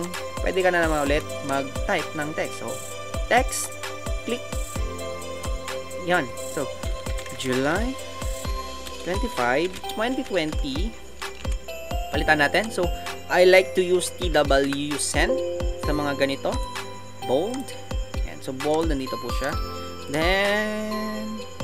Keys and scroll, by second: 0.0 Left, 0.8 Right, 0.9 Right, 1.1 Right, 6.8-7.8 typing, 10.5-11.4 typing.